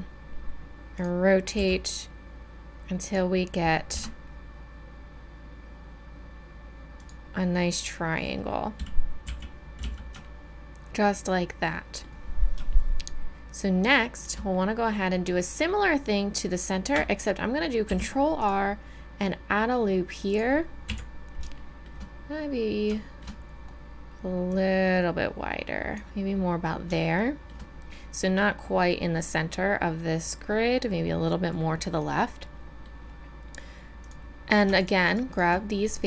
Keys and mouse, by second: 1.5 g, 3.9 r, 9.2 a, 9.8 z, 10.2-12.1 middle drag, 17.8 ctrl+r, 20.9 KP_1, 24.5-26.0 drag, 27.2-28.9 middle drag, 31.8 middle click, 34.0 click.